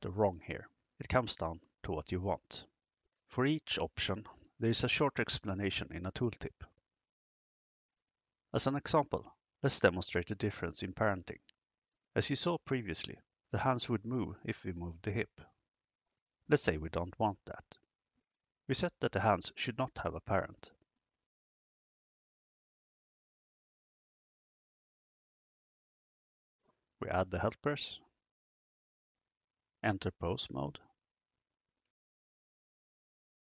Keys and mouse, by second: 13.3 click, 21.2 click, 23.7 click, 27.4 click, 30.7-32.7 drag.